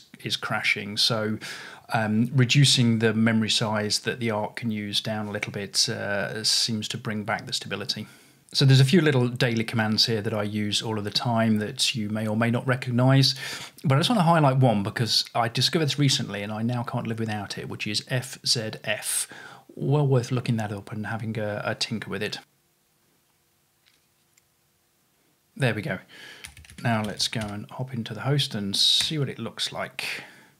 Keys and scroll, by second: 26.2-29.5 typing.